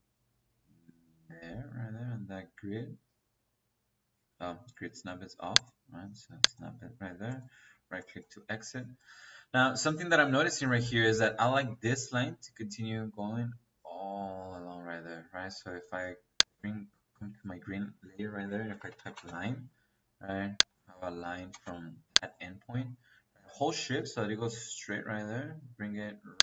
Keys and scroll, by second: 14.9 Escape, 17.9 Escape, 18.7-19.3 typing, 21.1 Escape, 21.4 space.